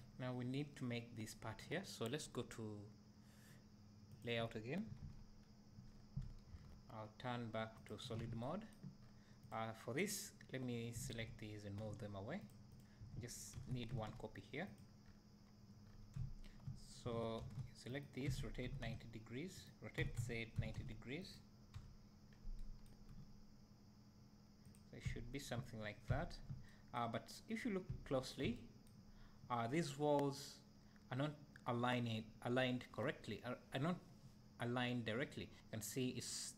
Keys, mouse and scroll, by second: 4.2-4.9 drag, 5.9 scroll down 1, 6.6 KP_1, 7.8 click, 9.0-9.5 scroll down 2, 11.8 g, 12.8 click, 13.5 shift+d, 22.6 e, 24.6 g, 24.9 click, 26.7 e, 28.5 e.